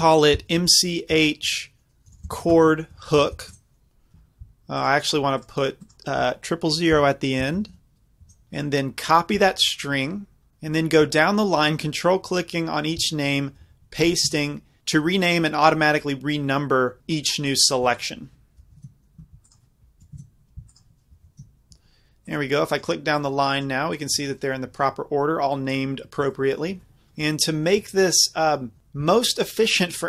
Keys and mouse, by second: 3.2 o, 4.8-6.7 drag, 7.6 KP_0, 7.7 KP_0, 8.6-10.2 drag, 10.2-15.5 middle drag, 18.0-26.2 middle drag, 27.1-30.0 middle drag, 27.1 z.